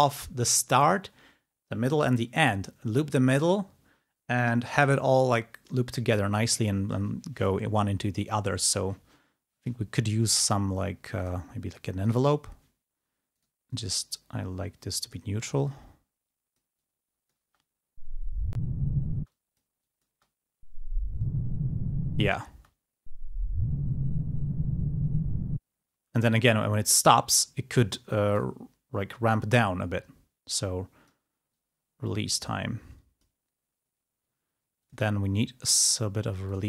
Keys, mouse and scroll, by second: 11.3 click, 12.1 click, 13.4 right click, 13.7-15.4 drag, 15.7-16.8 drag, 16.9 click, 17.5 space, 19.2 space, 19.3 click, 19.9 click, 20.2 space, 22.2 space, 26.3 space, 30.1-31.3 drag, 31.6-33.5 drag, 34.9 click, 36.5 click.